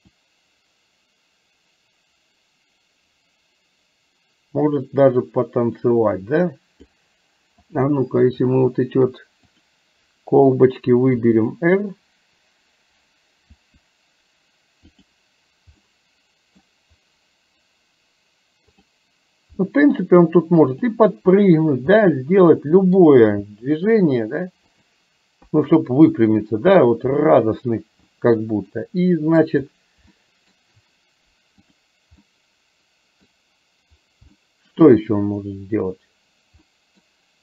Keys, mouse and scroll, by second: 0.1-7.1 drag, 11.2 r, 13.6 r, 15.8 middle click, 18.7 click, 19.6 middle click, 22.1-23.1 middle drag, 23.5 r, 25.5 KP_2, 25.8 KP_3, 28.8 middle click, 30.2 shift+middle click, 31.7 click, 32.3-33.3 middle drag, 34.5 shift+middle click, 36.7 middle click.